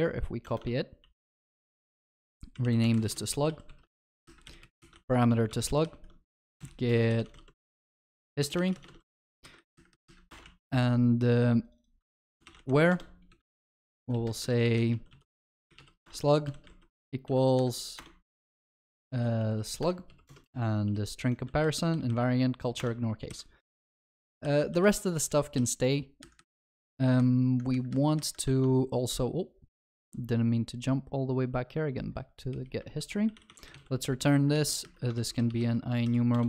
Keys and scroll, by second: 0.7 ctrl+v, 1.1 ctrl+s, 3.5 ctrl+w, 3.7 ctrl+c, 5.0 ctrl+w, 5.1 ctrl+v, 5.3 ctrl+s, 12.9 Return, 19.1 ctrl+w, 23.9 Escape, 23.9 ctrl+alt+shift+l, 24.2 ctrl+s, 35.2 ctrl+w, 36.3 ctrl+w.